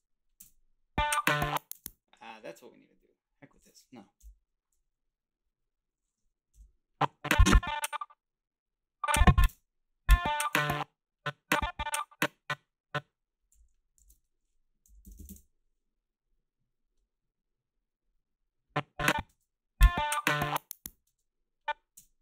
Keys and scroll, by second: 0.4 space, 1.8 space, 4.2 Delete, 6.5 Delete, 9.5 space, 13.6 g, 14.8-15.6 typing, 19.3 space, 21.1 space, 21.9 space.